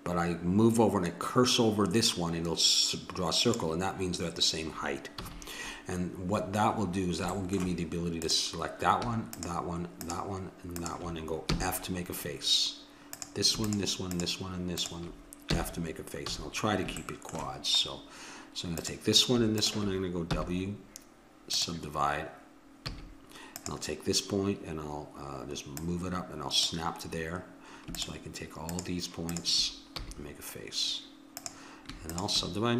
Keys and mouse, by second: 5.2 a, 8.2-11.0 drag, 11.5 f, 15.5 f, 16.2 a, 18.7-21.2 drag, 20.3 w, 22.9 a, 23.5-27.9 drag, 29.9 f.